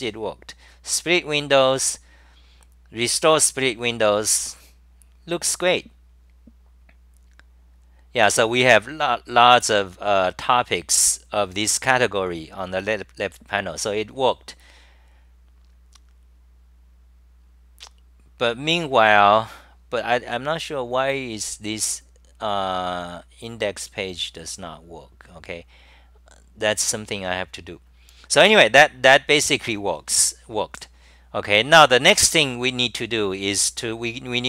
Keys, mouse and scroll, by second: 20.7-21.4 typing.